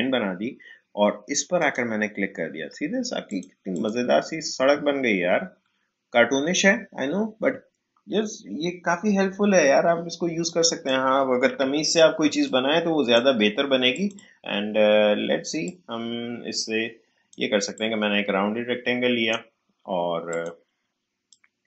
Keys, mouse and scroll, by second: 4.9 alt+scroll up 1, 6.0 alt+scroll down 1, 10.4 click, 11.5 Delete, 12.2 space, 12.4 click, 12.7 space, 13.9-21.6 drag.